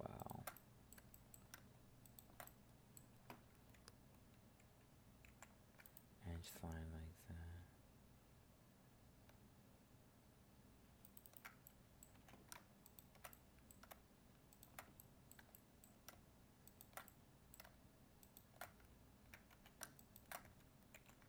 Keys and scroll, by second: 5.2 ctrl+e, 20.9 ctrl+e.